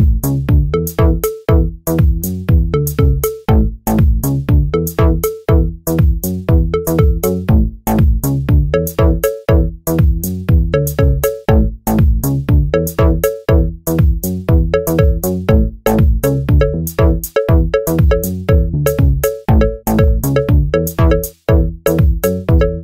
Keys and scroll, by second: 12.3 typing, 13.4 typing.